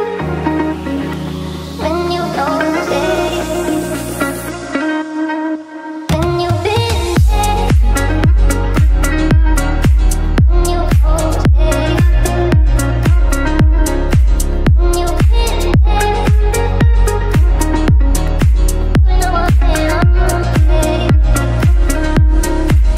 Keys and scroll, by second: 2.0 d, 4.3 e, 9.8 Right, 10.1 Down, 10.4 Right, 10.8 Up, 10.9 Right, 11.1 Down, 11.6 F3, 13.3 shift+F2, 13.4 F3, 13.6 Down, 15.6 Up, 16.7 shift+F2, 17.1 F3, 18.9 Escape, 19.4 Delete, 20.8 Delete.